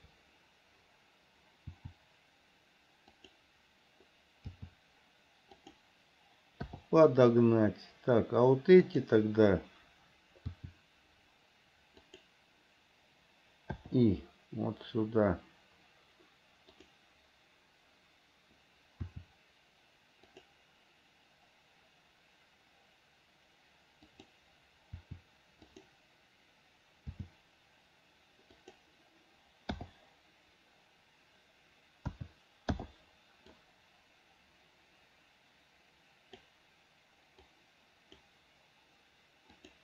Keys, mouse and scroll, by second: 1.9 r, 4.8 g, 6.9 i, 9.1 click, 10.8 r, 14.0 i, 17.0 click, 19.3 r, 24.4 click, 25.2 r, 27.3 g, 30.0 i, 32.3 a, 33.0 i, 33.8-36.7 drag, 37.7 click.